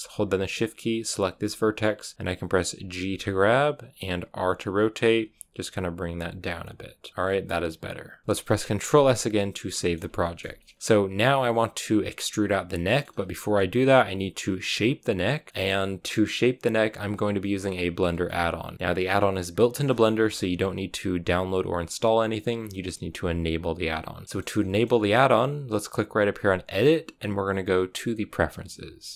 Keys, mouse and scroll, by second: 2.9 g, 4.2 r, 5.0 g, 6.3 scroll down 4, 7.0 scroll down 2, 7.2-10.4 middle drag, 10.4-12.6 scroll up 3, 10.5 middle click, 12.6 scroll down 3, 12.8 middle click, 13.0 scroll up 2, 15.4-29.1 middle drag.